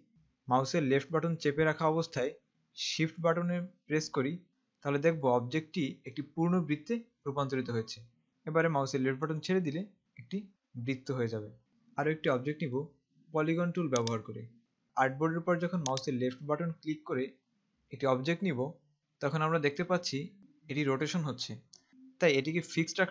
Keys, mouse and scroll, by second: 11.7 z, 12.5 right click, 13.9 click, 16.1 click.